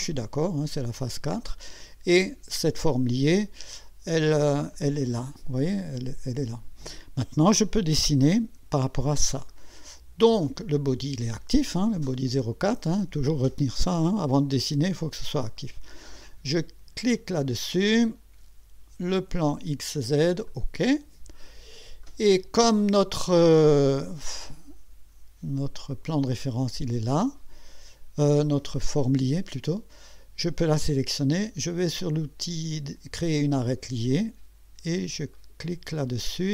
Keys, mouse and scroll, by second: 4.7 click, 8.4 1, 9.1 scroll up 2, 9.5 right click, 17.0 click, 19.5 click, 20.5 click, 21.5 scroll up 1, 22.0-22.7 right drag, 33.6 click, 35.3 click.